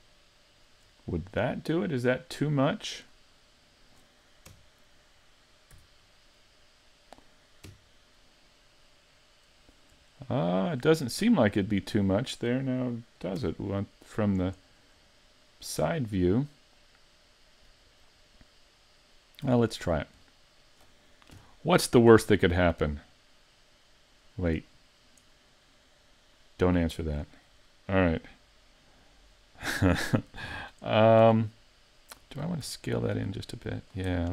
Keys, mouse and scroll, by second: 0.1 shift+right click, 0.5 shift+right click, 3.1 middle click, 4.5 KP_3, 5.8 z, 7.7 KP_5, 10.2 shift+middle click, 11.6 middle click, 13.4 KP_3, 16.9 KP_3, 19.5 z, 19.9-20.2 scroll down 4, 20.2 middle click, 21.3 KP_5, 22.3 middle click, 25.3 middle click, 27.7 middle click, 30.5-30.9 scroll up 5, 30.9 shift+middle click, 31.4 middle click, 32.7 s, 33.9 click, 34.2 middle click.